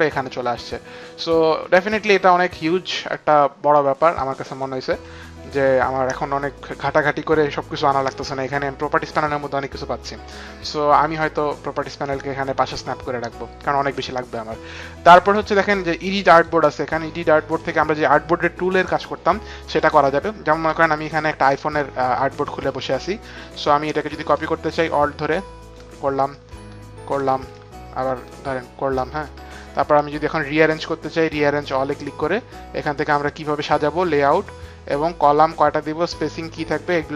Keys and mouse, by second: 11.1 click, 16.2 click, 22.3 space, 22.6 click, 24.6 alt+click, 26.3 alt+click, 27.5 alt+click, 31.5 alt+click.